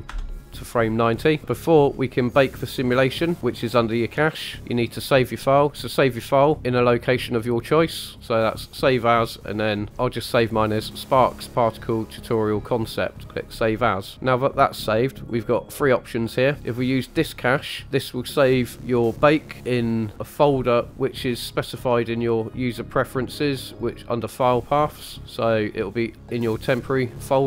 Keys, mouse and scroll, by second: 1.4-3.4 scroll down 4, 3.4 scroll up 4, 3.6 click, 7.7-9.1 drag, 17.1 click, 21.5-22.7 drag.